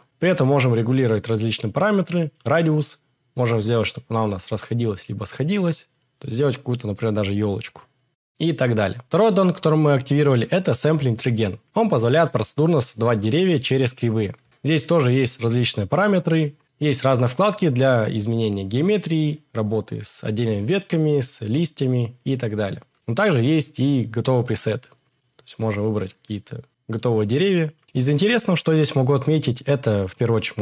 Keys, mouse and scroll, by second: 0.8-2.3 drag, 2.7-5.7 drag, 7.8-22.3 drag, 28.5-30.2 drag.